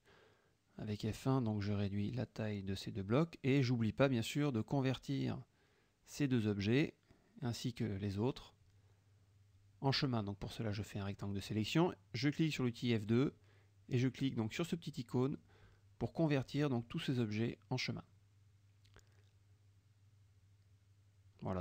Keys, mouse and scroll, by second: 0.1 shift+click, 0.9-2.5 drag, 2.8 F2, 2.8 click, 3.6 click, 6.2 click, 7.2 click, 7.7 click, 8.2 click, 8.6 click, 9.1 F1, 9.4-10.0 drag, 10.2-11.2 drag, 13.4 click, 15.4 click, 16.4 click, 17.1 click, 17.8 click, 19.5 click, 20.1 click, 20.4 click, 21.1 click.